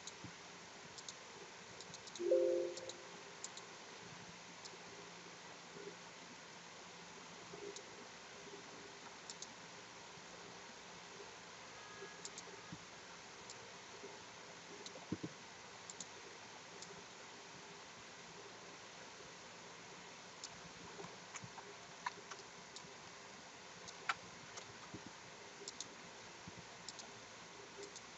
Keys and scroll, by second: 21.9 ctrl+t, 24.6 Return.